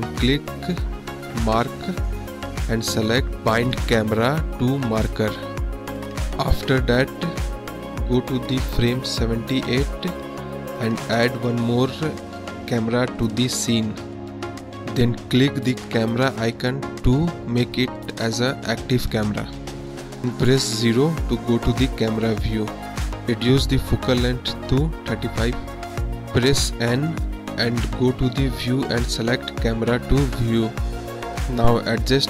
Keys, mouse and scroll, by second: 0.0-1.5 drag, 5.1-10.2 drag, 10.8 middle drag, 11.3 middle drag, 12.3 middle drag, 13.4 shift+a, 20.9 click, 22.1 KP_0, 25.5 click, 27.5 n, 28.6 click, 29.6 click.